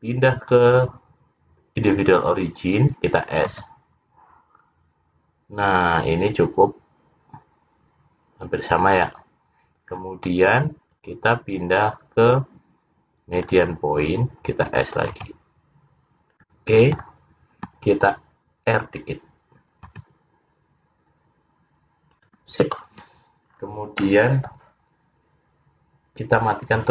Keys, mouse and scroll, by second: 3.6 s, 11.0 click, 15.2 s, 16.4 s, 20.0 r, 23.7-24.3 scroll down 3, 24.1 middle click, 26.5 click.